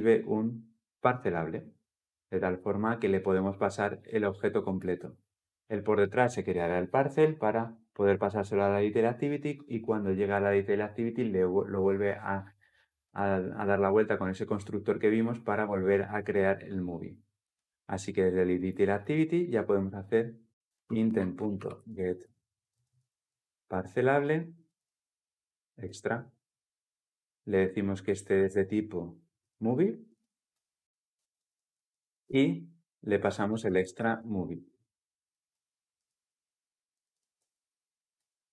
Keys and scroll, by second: 25.6 Return, 30.4 Return, 33.5 Return, 33.7 ctrl+shift+t, 37.9 Return.